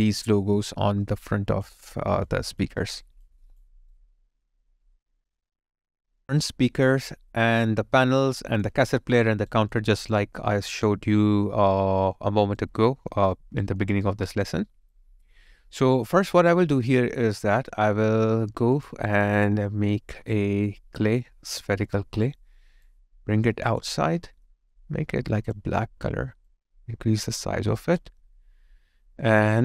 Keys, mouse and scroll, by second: 1.3 alt+click, 1.8 alt+middle click, 2.2 alt+click, 2.8 alt+right click, 3.2 alt+click, 3.8 alt+right click, 4.1 alt+middle click, 6.6 alt+right click, 8.2 alt+click, 8.9 alt+right click, 9.8 alt+click, 10.4 alt+right click, 11.1 alt+middle click, 11.8 alt+right click, 12.9 alt+middle click, 13.4 alt+right click, 13.9 alt+click, 14.5 alt+right click, 15.2 alt+middle click, 15.5 alt+click, 16.0 alt+right click, 16.4 alt+middle click, 16.8 alt+click.